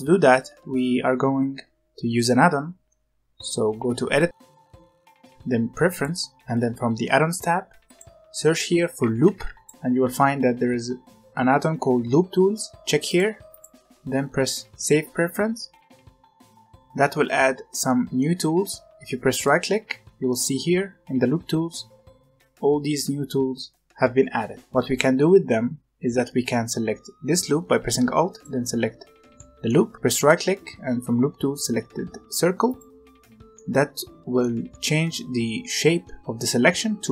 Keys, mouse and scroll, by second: 4.1-6.3 drag, 17.8-19.4 middle drag, 19.4-25.1 right drag, 25.1 middle click, 28.2 alt+click, 29.3 middle click, 30.1-33.1 right drag, 33.5 middle click, 34.7 middle click.